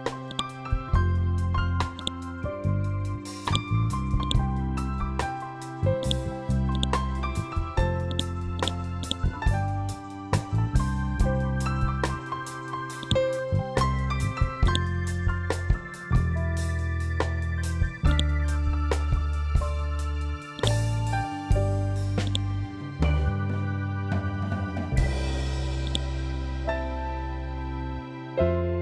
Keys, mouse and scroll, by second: 7.6 ctrl+click, 12.5-17.3 drag, 17.6-20.1 drag, 20.1-24.5 drag, 25.3-28.8 drag.